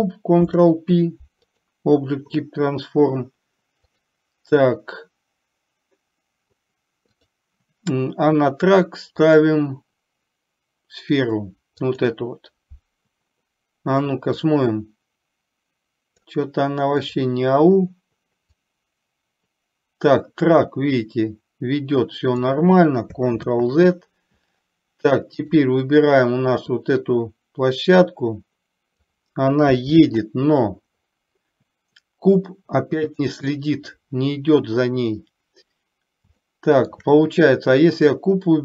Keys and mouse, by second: 0.4 ctrl+p, 9.3 click, 14.4-16.4 drag, 18.8-22.6 drag, 23.5 ctrl+z, 25.5 click, 26.9-29.1 drag, 30.0 ctrl+z, 33.1 click, 36.5-36.9 shift+middle drag, 37.9 click, 38.3-38.6 drag.